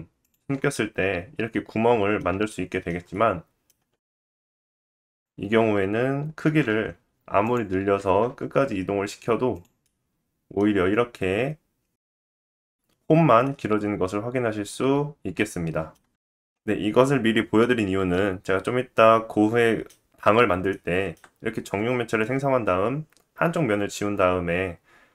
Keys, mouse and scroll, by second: 0.2 click, 0.3-4.3 middle drag, 4.3 click, 4.4 middle click, 4.4-4.9 scroll down 2, 4.9 click, 5.2-6.4 middle drag, 6.4 s, 8.0 g, 9.8 middle click, 10.6-10.9 middle drag, 10.9 scroll up 1, 12.5 click, 12.7-19.6 middle drag, 16.7 scroll up 1, 20.7 shift+middle click.